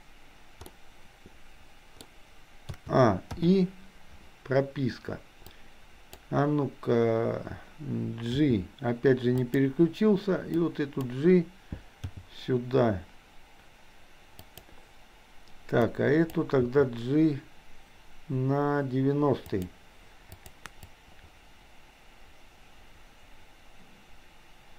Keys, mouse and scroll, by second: 0.7-2.1 middle drag, 2.7 a, 3.5 i, 5.5 click, 8.5 g, 10.6 click, 12.2 g, 15.8 click, 16.6 g, 20.5 click, 21.0-24.7 drag.